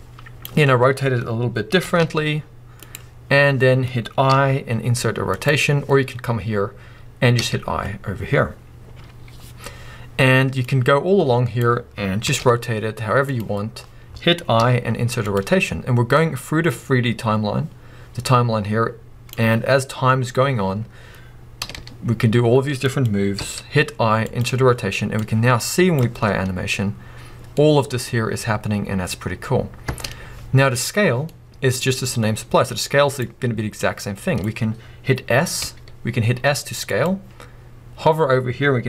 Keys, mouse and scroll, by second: 1.8 r, 10.6-13.4 drag, 12.3 r, 16.2-23.0 drag, 21.6 r, 25.2-27.6 drag, 26.1 space, 27.6-32.7 middle drag, 29.9 space, 31.8-32.3 scroll up 2, 32.7-37.0 drag, 34.7-35.1 scroll down 2, 35.6 s.